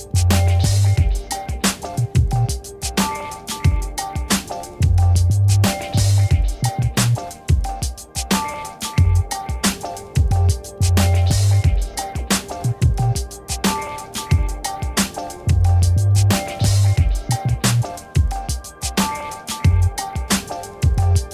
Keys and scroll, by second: 16.9 7, 17.1 0, 17.8 Return.